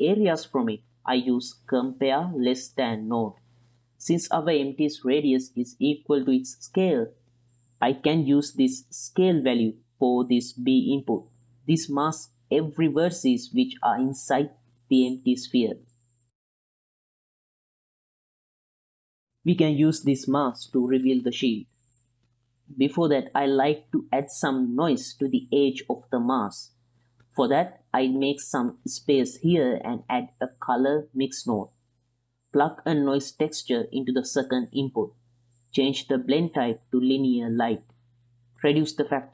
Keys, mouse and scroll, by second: 0.2 click, 0.5 click, 1.1-3.7 drag, 2.3 s, 4.0 ctrl+middle click, 4.6 shift+middle click, 4.8-5.2 middle drag, 7.4 click, 8.3-9.9 drag, 11.4 ctrl+shift+click, 13.3-14.8 drag, 15.3 g, 18.5 ctrl+click, 19.0 click, 19.2 ctrl+middle click, 19.5 middle click, 21.3-22.4 drag, 23.5-24.4 drag, 24.7-26.1 drag, 26.6-28.4 drag, 28.9 middle drag, 29.5 click, 30.2 click, 30.6 click, 32.0 drag, 32.4 click, 32.8 click, 33.2 shift+a, 34.7-35.1 drag, 35.3 click, 36.2-37.5 drag, 37.9-38.3 middle drag, 38.5-39.3 drag.